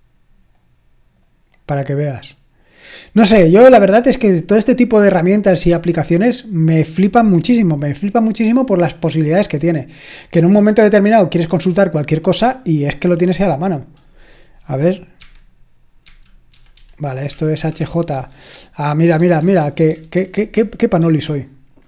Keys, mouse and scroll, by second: 0.6-2.4 drag, 6.0-10.3 scroll down 1, 15.2-18.1 typing, 19.2-21.2 typing.